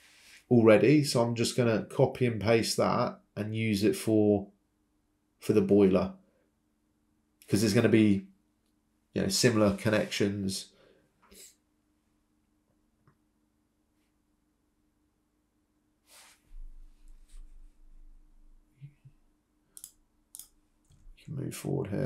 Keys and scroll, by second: 6.4 Delete.